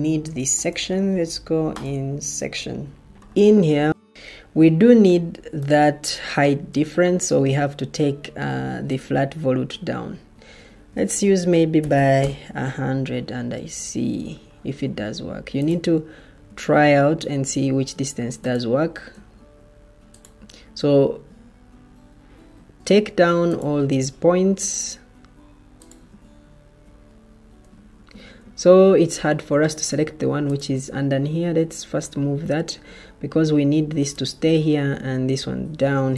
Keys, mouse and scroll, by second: 4.6 Escape, 10.6 shift+Tab, 11.5-11.8 typing, 15.8 Escape, 24.4 Escape, 25.8 shift+Tab.